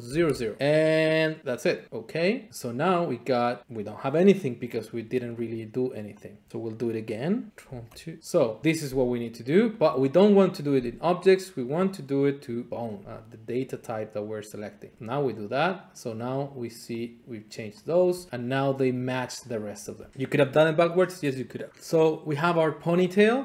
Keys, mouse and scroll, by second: 0.0 typing, 1.8 click, 3.5 click, 5.6 shift+click, 6.2 shift+click, 7.6 ctrl+F2, 8.6 click, 9.8-10.8 drag, 13.5-14.6 drag, 15.0-16.0 drag, 16.4-18.5 drag, 19.4 click, 19.8 click, 21.7 scroll, 21.9-22.6 scroll down 2.